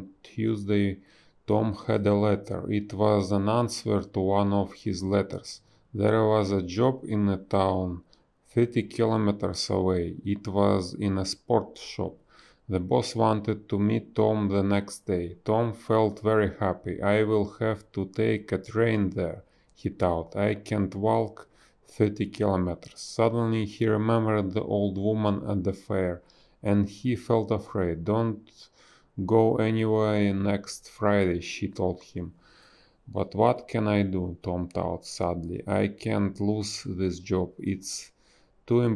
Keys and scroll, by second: 0.7 ctrl+z, 2.2 a, 5.0 space, 9.5 space, 12.5 space, 14.6 b, 20.1 a, 20.4 space, 23.0 ctrl+z, 28.1 b, 29.6 ctrl+z, 31.2 space, 32.3 ctrl+z, 32.4 space, 34.8 space, 36.3 space, 36.7 a.